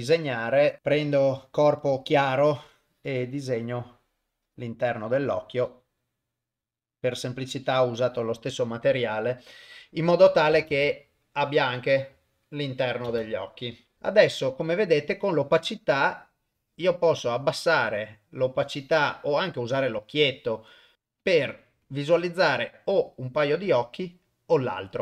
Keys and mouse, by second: 0.8-2.1 drag, 2.9-4.6 drag, 5.5-7.8 drag, 10.7 shift+space, 13.1 shift+space, 13.9 shift+Left, 15.1-17.3 drag, 18.6-19.3 drag, 20.9-22.7 click, 21.8 click, 23.4 click.